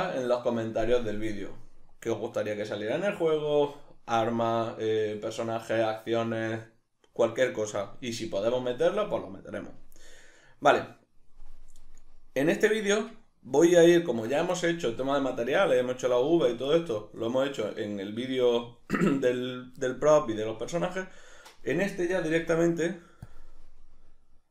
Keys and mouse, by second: 12.5 middle click, 21.6 middle click, 22.3 z.